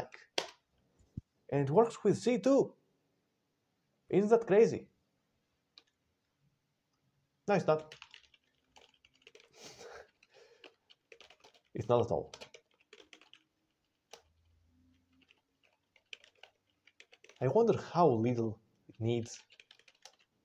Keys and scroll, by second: 0.2 Return, 7.9 ctrl+e, 8.7 ctrl+x, 8.8 ctrl+s, 8.9 ctrl+x, 8.9-9.7 typing, 10.0 alt+BackSpace, 10.1 alt+BackSpace, 10.5 alt+BackSpace, 10.8-14.0 typing, 15.2 alt+BackSpace, 15.6-17.6 typing, 18.8-20.4 typing.